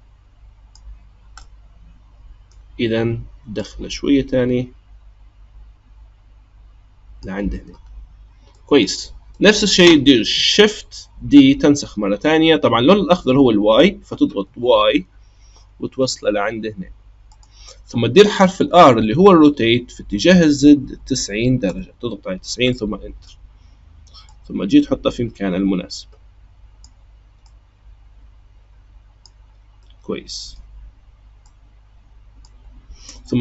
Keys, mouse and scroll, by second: 1.1 scroll up 1, 1.4-3.5 middle drag, 3.5 click, 7.9-8.5 scroll down 2, 8.5-11.2 middle drag, 11.2 shift+d, 18.6 r, 22.7-24.2 middle drag, 24.2 click, 27.4 click, 29.8-31.4 middle drag, 31.4 click.